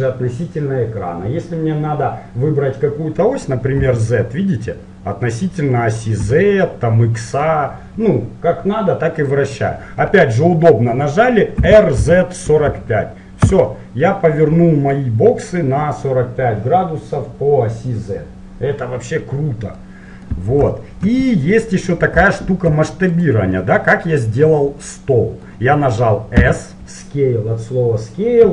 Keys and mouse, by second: 11.6 r, 14.6-16.3 middle drag, 20.0-23.3 middle drag, 23.3-24.6 drag, 24.5-26.2 middle drag, 26.6 s.